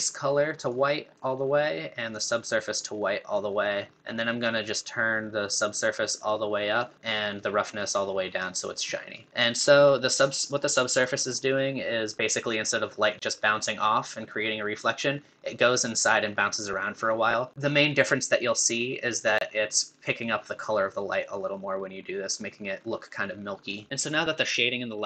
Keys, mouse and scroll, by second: 0.6-3.4 scroll up 1, 3.4-5.7 scroll up 1, 5.7-7.8 scroll up 1, 7.8-10.2 scroll up 1, 10.2-11.4 scroll up 1, 11.4-13.3 scroll up 1, 13.3-15.6 scroll up 1, 15.6-17.5 scroll up 1, 17.5-20.4 scroll up 1, 20.4-22.2 scroll up 1, 22.2-23.1 scroll up 1.